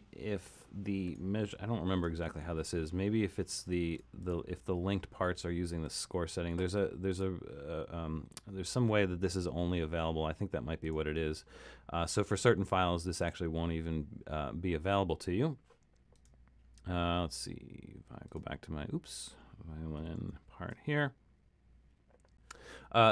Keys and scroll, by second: 20.2 alt+super+,.